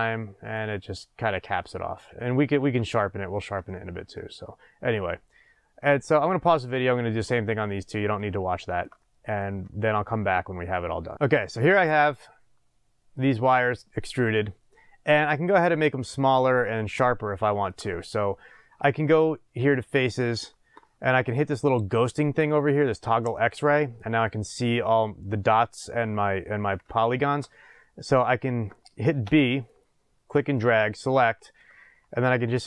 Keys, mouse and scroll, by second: 1.6-19.7 middle drag, 7.8 scroll down 1, 13.3 scroll up 2, 13.5-14.3 scroll down 2, 14.3-15.0 scroll up 2, 15.0-15.8 scroll up 1, 16.7-17.3 scroll up 2, 19.7 click, 23.3 click, 24.4-30.2 middle drag, 26.2-26.9 scroll up 2, 29.2 b.